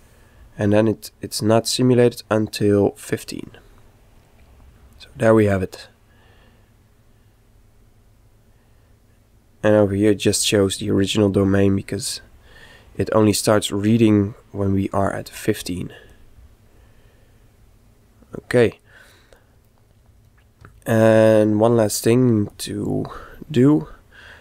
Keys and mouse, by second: 1.1 click, 10.8-13.6 middle drag, 11.4 z, 13.3 click, 16.1 click, 19.7 middle click, 20.7 z, 22.6 click.